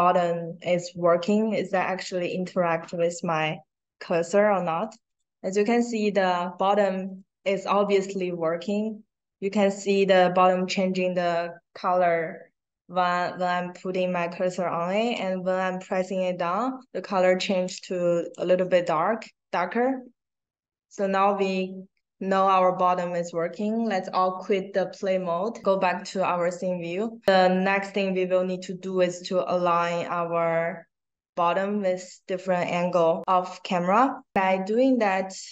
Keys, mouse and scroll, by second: 2.9 click, 3.9 click, 4.8 click, 5.6 click, 6.0 click, 6.5 click, 6.9 click, 7.7 click, 15.1 click, 18.2 click, 18.7 click, 23.9 click, 26.1-27.2 right drag, 27.3 click, 33.2 click.